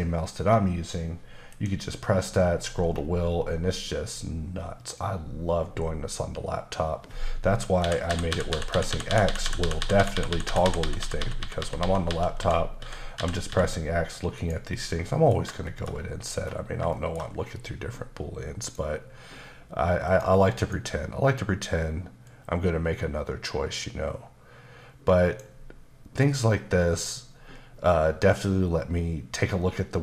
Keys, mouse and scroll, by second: 1.5 ctrl+shift+b, 2.2-2.9 scroll down 5, 3.0-4.0 scroll up 7, 4.0-5.1 scroll down 5, 5.1-5.6 scroll up 1, 5.6-6.6 scroll up 2, 6.6-7.8 scroll up 1, 7.8-9.4 typing, 13.5 typing, 14.4 click, 15.7 shift+middle click, 15.9-16.8 scroll up 4, 16.9 shift+middle click, 18.6 click, 20.1 click, 20.6 click, 22.3 click.